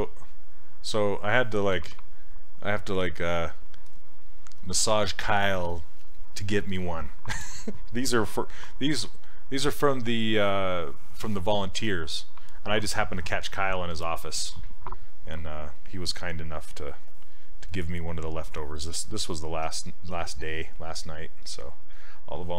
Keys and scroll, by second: 19.7 s.